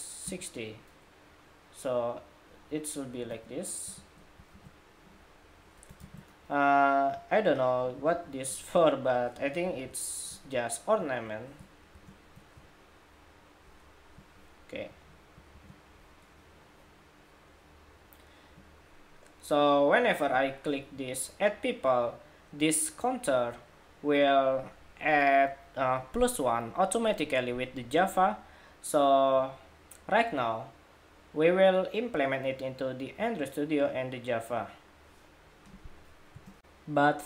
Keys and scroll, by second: 4.4 super+-, 5.7 super+g, 7.9 super+=, 9.6 alt+Down, 11.7 alt+shift+Down, 15.4 super+-.